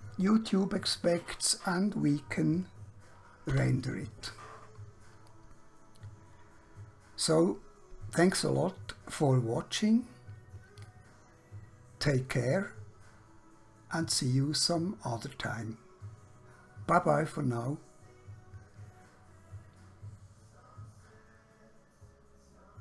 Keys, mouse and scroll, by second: 3.5 F12, 10.8 click.